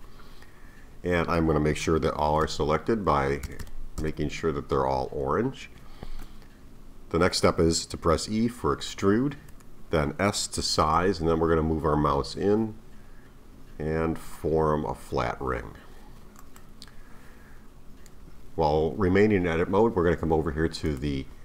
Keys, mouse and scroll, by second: 2.3 a, 2.4 a, 3.4 a, 3.6 a, 4.0 a, 9.5 e, 20.9 click.